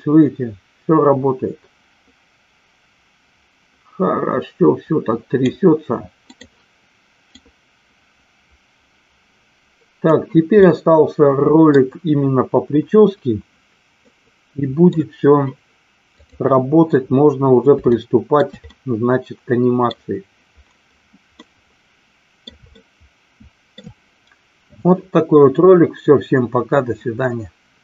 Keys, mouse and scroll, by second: 7.4-10.0 drag, 10.8-11.6 middle drag, 14.0-14.9 middle drag, 16.1 click, 17.9-18.4 shift+middle drag, 18.8-19.9 middle drag, 21.3-22.4 middle drag, 22.8-23.8 shift+middle drag.